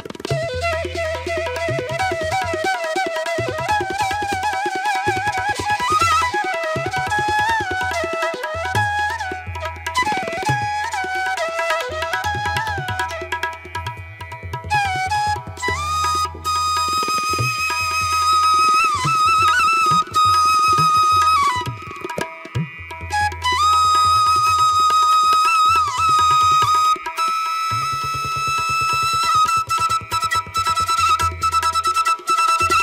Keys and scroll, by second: 0.1 ctrl+=, 0.9 ctrl+=, 1.5 space, 12.1 space, 12.4 ctrl+-, 12.8 ], 13.2 ctrl+alt+z, 14.7 space, 19.6 space, 25.0 ctrl+=, 25.4 ctrl+=, 26.1 space, 26.5 ctrl+=, 26.9 space, 27.3 ctrl+=.